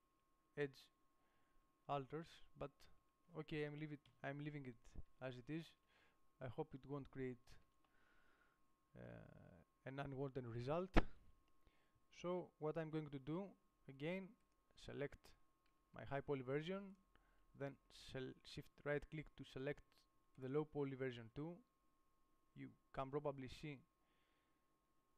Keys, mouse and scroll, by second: 0.5 Tab, 1.9 Tab, 3.3 Tab, 4.5 KP_7, 6.1 Tab, 10.1-13.8 right drag, 14.8-16.5 right drag, 16.0 g, 17.2 click, 20.8 right click, 23.6-24.9 drag, 24.9 middle click.